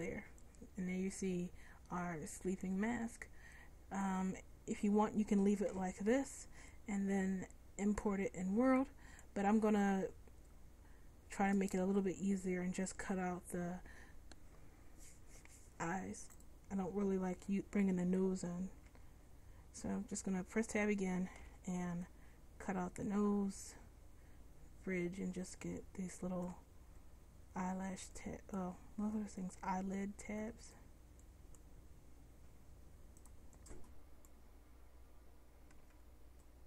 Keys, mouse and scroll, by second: 5.8 a, 6.2 a, 16.5-18.2 drag, 18.3 middle click, 19.0 Tab, 21.5 c, 35.9 c.